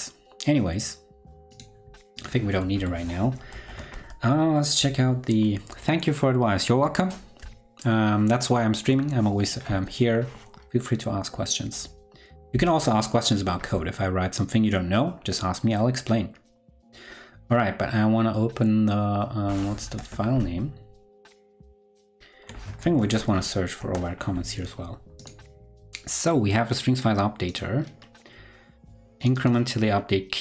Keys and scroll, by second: 3.5 shift+super+o, 20.3 ctrl+Left, 21.7 ctrl+Right, 22.3 ctrl+Right, 22.8 shift+super+f.